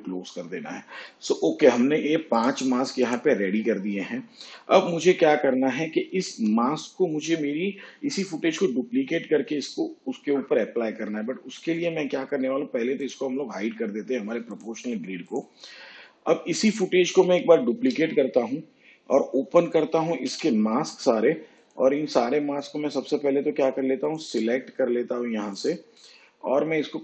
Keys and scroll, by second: 6.3 shift+/, 17.7 ctrl+d, 20.2 m, 26.8 ctrl+x.